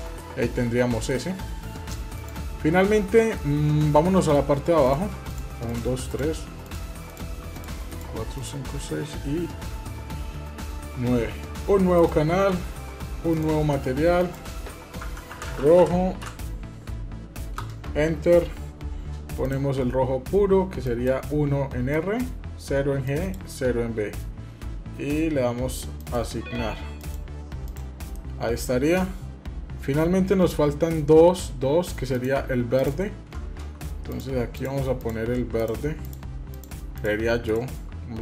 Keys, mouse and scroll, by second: 0.0 middle click, 1.9 click, 3.1-4.1 middle drag, 4.6 click, 5.0 shift+click, 5.4 shift+click, 5.9 shift+click, 6.5 shift+click, 11.7 click, 13.1 drag, 14.0-18.4 drag, 19.2 click, 26.8 click, 27.4 click, 27.9-30.7 middle drag, 31.9 click, 32.5 click, 33.9-35.6 shift+drag.